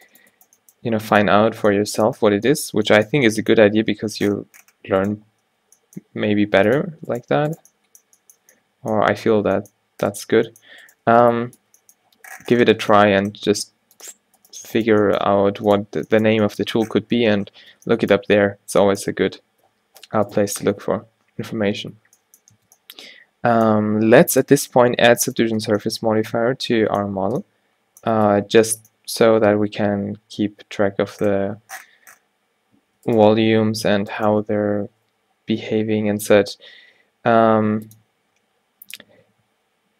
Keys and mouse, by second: 0.6 g, 2.6 click, 5.1 click, 5.7 g, 6.7-8.4 drag, 7.4 g, 9.4-11.8 typing, 15.0 g, 16.0 Tab, 17.8 z, 18.6 z, 19.7 z, 20.1 z, 20.7 Tab, 21.1 z, 22.0 z, 22.6 Tab, 28.4 Tab, 29.8 Tab, 31.0 Tab, 32.9 a, 33.5 g, 34.7 o, 37.5 r.